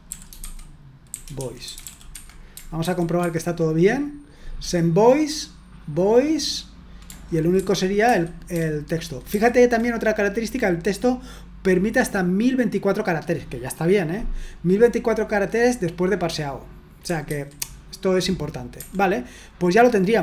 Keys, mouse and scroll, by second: 0.0-2.3 typing, 2.7 super+1, 3.2 super+1, 7.5 super+2, 8.0 super+3, 8.5 super+1, 10.8-12.7 drag, 17.3 super+1, 18.8 Escape, 19.3-20.2 scroll down 1.